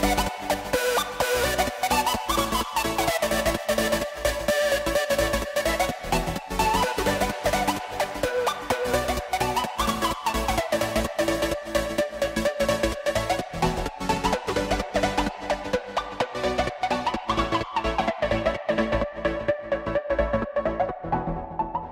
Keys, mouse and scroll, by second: 10.1 click, 11.1 click, 11.8 click, 14.1-15.5 drag, 16.0 click, 18.2-20.4 drag, 21.1 click, 21.8 click.